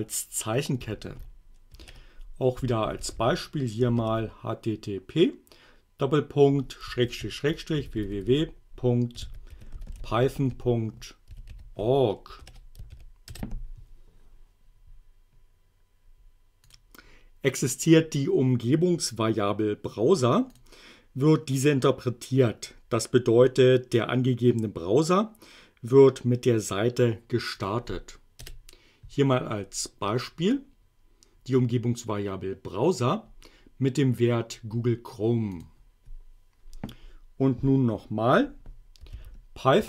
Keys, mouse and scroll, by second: 0.9 shift+8, 2.3-4.0 typing, 7.1-12.9 typing, 13.3 shift+Return, 16.7 click, 20.6 click, 27.6 click, 28.5 Return, 30.5-34.8 drag, 35.6 click, 38.7-39.8 typing.